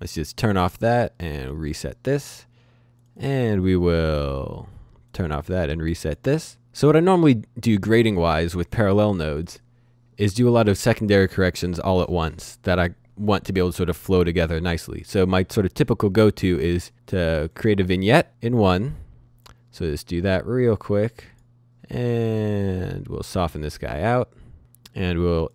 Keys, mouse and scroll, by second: 0.0 click, 5.1 click, 9.2 click, 16.5 click, 18.1-18.9 scroll down 1, 18.9 click, 20.9 click, 25.2 click.